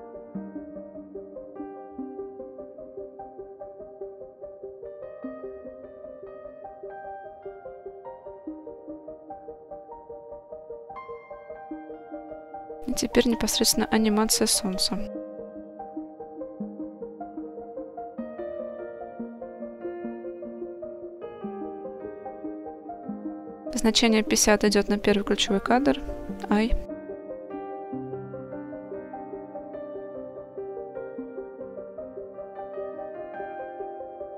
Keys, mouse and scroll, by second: 0.5 click, 1.9 click, 2.2-3.6 drag, 3.6-5.5 middle drag, 7.2-10.7 drag, 10.9 click, 12.4-12.7 middle drag, 12.8-13.2 scroll down 2, 13.2 shift+middle click, 13.6 middle click, 14.1 scroll up 1, 14.5 shift+middle click, 16.6-18.6 drag, 19.0-21.0 drag, 21.5-22.8 middle drag, 27.1 i, 28.8 middle click, 30.4-34.3 drag.